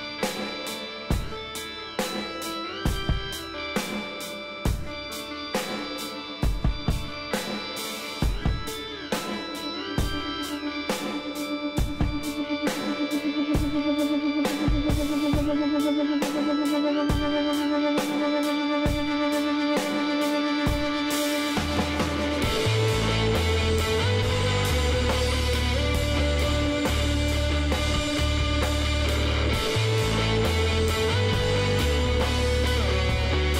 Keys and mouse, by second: 0.5 z, 2.5 z, 2.9 click, 3.6 KP_Divide, 4.0 middle click, 6.7 click, 7.1-10.1 middle drag, 10.1-11.9 drag, 11.9-17.2 middle drag, 17.2-21.7 drag, 21.7-28.4 middle drag, 27.4 ctrl+z, 27.9 ctrl+z, 28.1 ctrl+z, 28.4 ctrl+z, 28.6 ctrl+z, 28.9 ctrl+z, 29.2 ctrl+z, 29.6 ctrl+z, 30.1 ctrl+z, 30.5 ctrl+z, 31.3 middle click, 32.1-33.2 drag.